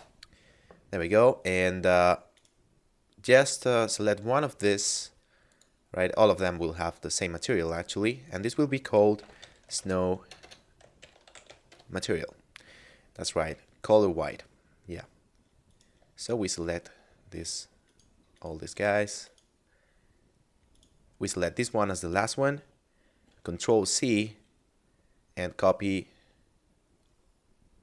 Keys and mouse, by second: 2.4 right click, 5.6 click, 7.8 click, 9.0-11.6 typing, 11.7 Return, 15.6 right click, 16.6 shift+right click, 17.4 shift+right click, 17.9 shift+right click, 18.4 shift+right click, 19.3 shift+right click, 20.6 shift+right click, 23.2 ctrl+c.